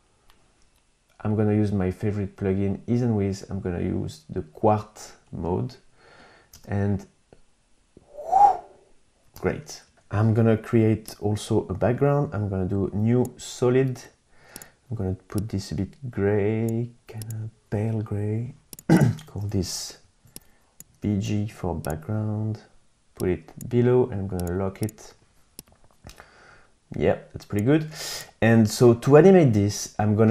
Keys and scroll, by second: 6.6 space, 9.4 space, 19.2 super+a, 19.7-21.7 typing.